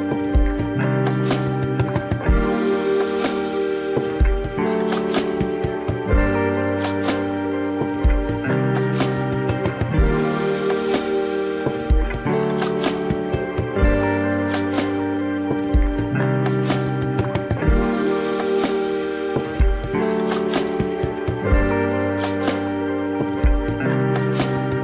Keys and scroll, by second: 8.1 u, 8.6 u, 9.3 u, 11.5 space, 24.3 space.